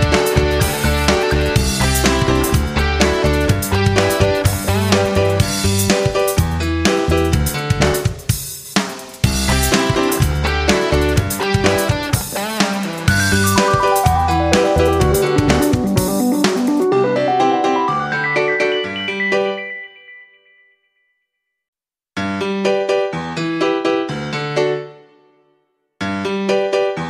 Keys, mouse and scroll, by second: 0.1-2.9 drag, 3.2 F9, 3.6-5.6 drag, 8.1 click, 8.6 shift+click, 9.2-10.6 drag, 11.4-25.6 drag, 26.4 F9.